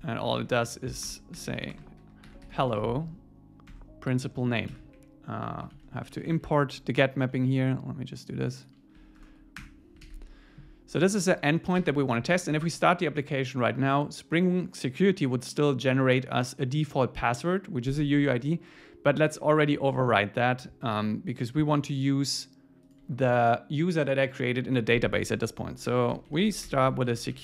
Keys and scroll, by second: 3.7 Tab, 4.7 super+s, 5.0 Up, 5.8 super+Left, 6.1 Right, 6.4 Page_Down, 7.0 Up, 9.2 alt+Return, 10.0 super+s, 20.0 super+1.